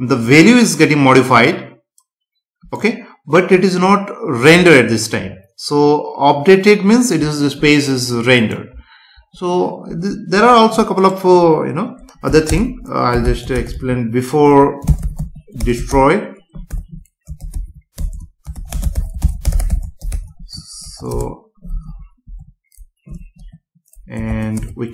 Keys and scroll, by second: 12.5 Return, 17.9 BackSpace, 18.7 space, 21.1 Return, 21.9 Down, 24.3 space, 24.6 Return.